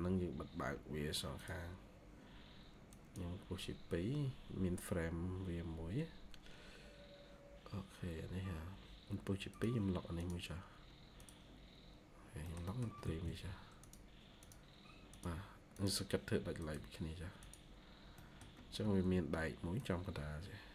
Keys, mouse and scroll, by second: 12.3 middle click, 12.9 typing, 17.7 scroll up 1, 18.1 middle click, 19.0 ctrl+q.